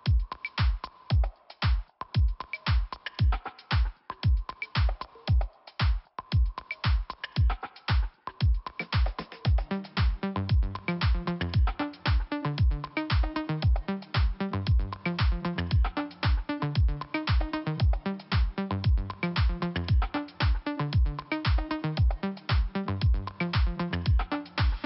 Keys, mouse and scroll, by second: 0.9 click, 1.6 click, 2.2 Delete, 3.6 click, 4.7 click, 6.0 click, 6.1 click, 6.4 Delete, 7.6 Delete, 7.8 click, 9.4 click, 9.5 click, 10.5-10.8 scroll up 2, 11.6 click, 13.7 scroll down 1, 14.2 scroll up 1, 15.9 click, 15.9 click, 18.3 click, 20.0 click, 21.9 click, 24.4 click, 24.5 click.